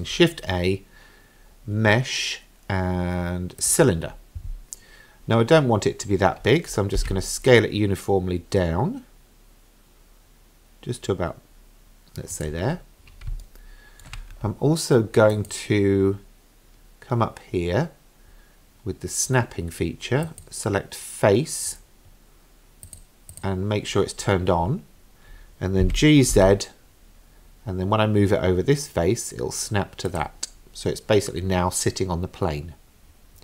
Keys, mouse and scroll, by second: 7.0 s, 12.7-13.3 scroll up 3, 13.4-14.1 shift+middle drag, 15.4-23.0 drag, 23.3 click, 25.8 g.